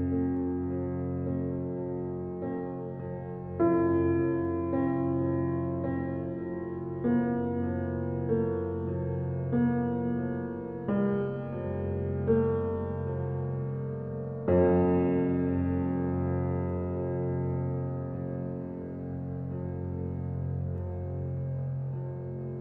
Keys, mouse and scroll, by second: 0.6 click, 1.8 click, 2.9 click, 4.6-5.4 drag, 5.9 g, 8.4 click, 8.7-9.0 scroll up 2, 9.0-10.5 middle drag, 10.7 click, 11.3 s, 12.8 g, 14.0 click, 14.2 scroll down 3, 14.4-15.6 middle drag, 15.6 scroll down 3, 15.9-16.8 middle drag, 16.8 ctrl+alt+KP_0, 17.5-17.8 scroll up 3, 17.8-18.4 middle drag, 18.4-18.8 scroll up 5, 18.8-20.9 shift+middle drag, 21.8-22.3 middle drag, 22.3 click, 22.5 Tab.